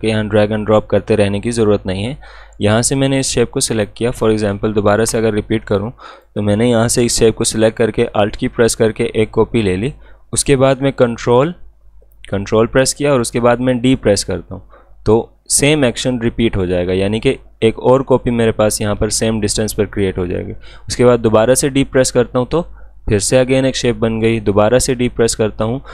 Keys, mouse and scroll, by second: 3.1-13.6 drag, 13.6 ctrl+d, 21.7 ctrl+d, 24.6 ctrl+d.